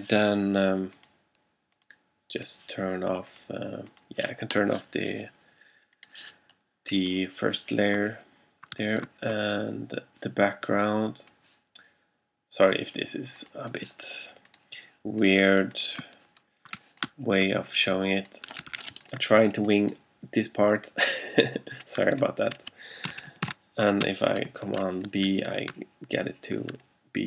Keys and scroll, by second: 8.8 alt+space, 16.8 alt+space, 18.8 super+z, 19.4 alt+super+z, 23.3 alt+super+x, 23.5 super+b, 24.1 super+space, 24.7 alt+space.